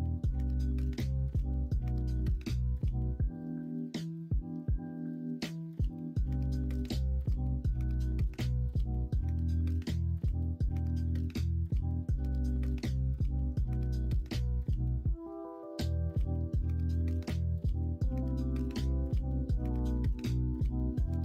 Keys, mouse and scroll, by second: 0.2-1.4 middle drag, 7.9 middle click, 8.3 alt+z, 8.9 alt+z, 9.8-10.2 middle drag, 10.9 middle drag, 11.3 middle click, 11.7 middle drag, 13.5 Tab, 13.8 middle click, 14.9 middle click, 16.5-20.0 drag, 20.0-21.2 middle drag.